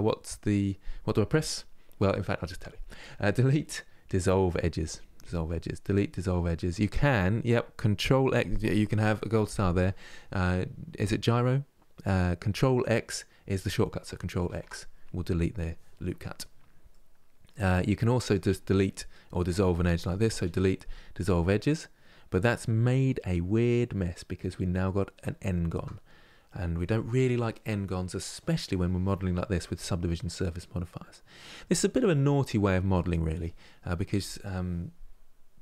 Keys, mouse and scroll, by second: 2.7 Delete, 14.2 ctrl+x, 16.6-18.0 middle drag, 18.0-20.0 drag, 20.0 Delete, 22.0-25.2 middle drag, 25.2 ctrl+z, 26.2-31.6 middle drag, 31.6-34.3 scroll down 1.